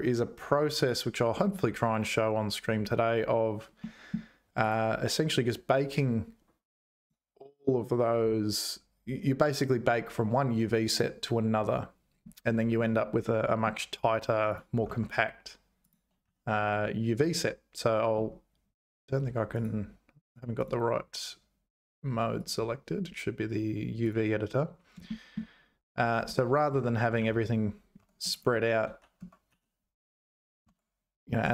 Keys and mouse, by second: 3.8 middle click, 13.2 middle click, 14.9 Tab, 15.8 click, 16.2 a, 19.7 click, 20.8-22.0 drag, 22.5-24.2 drag, 25.2 shift+click, 26.2 Tab, 26.7 Tab, 27.2 a, 28.0 Tab, 28.3 shift+click, 29.2 Tab, 29.5 a.